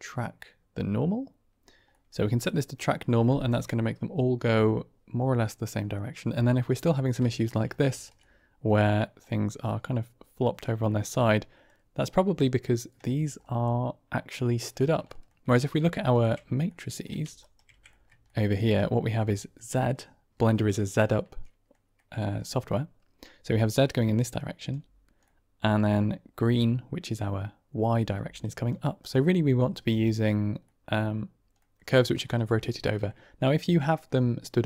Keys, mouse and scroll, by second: 1.9 click, 6.8 middle drag, 7.3 shift+middle click, 7.8 shift+middle click, 8.1-8.5 middle drag, 9.1-10.5 middle drag, 10.8 shift+middle drag, 11.6 drag, 13.0 shift+click, 15.0 shift+drag, 15.9 ctrl+click, 16.6 shift+drag, 17.4 ctrl+middle click, 17.8-18.5 shift+middle drag, 18.7-19.1 middle drag, 19.2 shift+drag, 20.9-21.6 middle drag, 21.8 middle click, 23.3-24.1 d, 23.4-24.6 drag, 24.7 d, 25.1 middle click, 28.1-28.9 d, 28.3-29.6 drag, 29.5 d, 29.5 d, 29.8 ctrl+z, 29.8 right click, 30.6-30.9 middle drag, 31.5 click, 32.5-32.9 shift+drag.